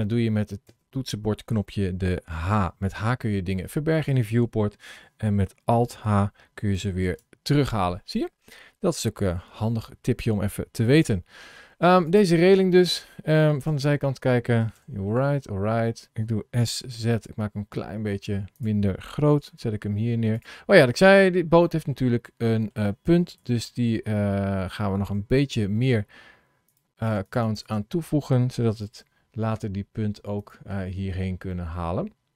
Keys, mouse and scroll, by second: 0.6 h, 2.2 h, 6.0 alt+h, 6.9 alt+h, 11.0 h, 11.8 click, 12.6 click, 13.5 KP_3, 14.5 KP_1, 15.6 scroll up 1, 16.5 s, 19.4 g, 21.5 middle click, 23.2 KP_7, 24.2 scroll down 1, 26.6 click, 27.0 click, 27.2 click, 27.4 click, 27.5 click, 28.7 g, 31.4 middle click.